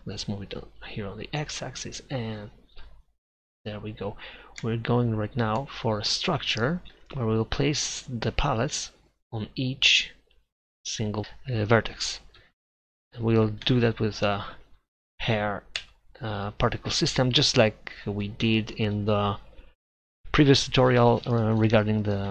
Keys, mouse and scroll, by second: 12.4 a, 12.7 a, 13.9 shift+d, 17.2-20.3 drag.